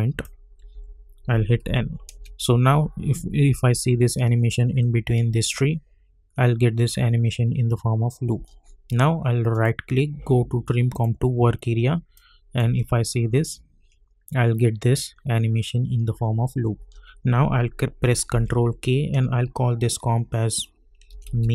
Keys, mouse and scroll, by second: 0.7 k, 1.6 n, 2.1 space, 8.3 space, 9.5 right click, 10.9 click, 12.6 space, 16.7 space, 18.3 ctrl+k, 20.8-21.5 typing.